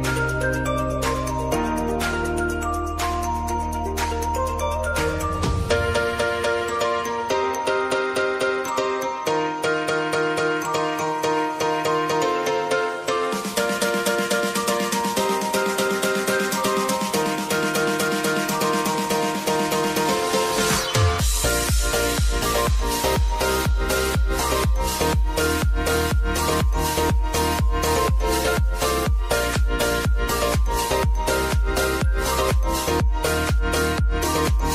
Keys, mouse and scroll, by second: 0.7 click, 1.4-1.7 typing, 2.6-4.3 drag, 4.6 F9, 5.6-9.4 drag, 9.6 space, 12.1 click, 12.3 j, 13.5-15.5 drag, 16.7 space, 18.9-26.1 shift+drag, 26.3 space, 28.5 click, 30.2 space, 32.4 space, 33.2 click, 34.4 ctrl+d.